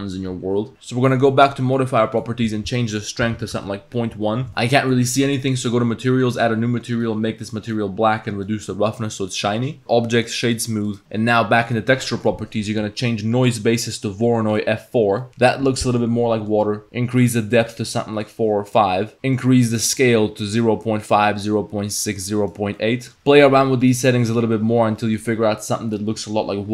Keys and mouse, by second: 2.3-3.7 drag, 4.6 middle click, 5.6 click, 8.5 click, 9.6 middle click, 10.9 click, 13.0-14.6 drag, 15.2 click, 15.9 click, 16.4 click, 17.2 click, 17.6 click, 18.8 click, 19.4-22.6 drag, 22.8-23.1 drag, 23.8-24.4 drag, 25.0 click.